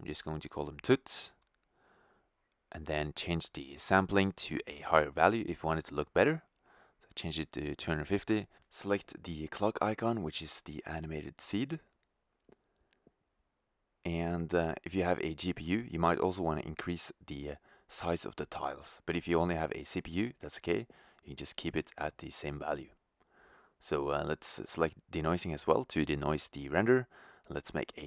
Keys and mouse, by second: 0.0 Return, 2.2-5.0 drag, 13.5-18.1 drag, 18.2 0.